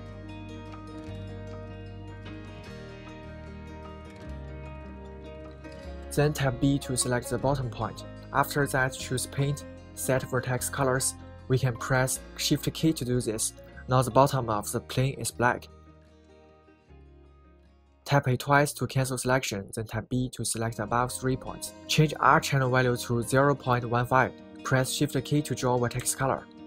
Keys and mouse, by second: 7.2 b, 11.1-15.2 right drag, 17.5 a, 17.7 a, 19.2 b, 23.0 click, 24.3 click.